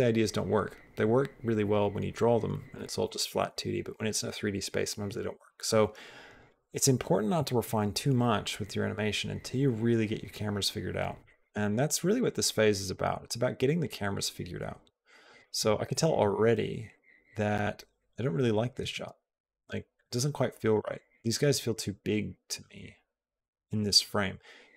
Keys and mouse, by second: 11.0 click, 12.0-15.3 drag, 15.5 space, 18.7 space.